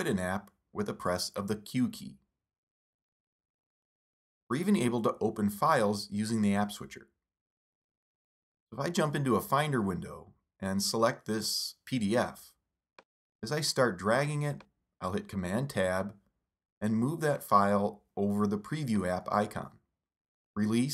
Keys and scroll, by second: 0.1 super+Left, 2.0 super+q, 7.6 super+Tab, 14.3 super+Tab, 18.6 super+Tab.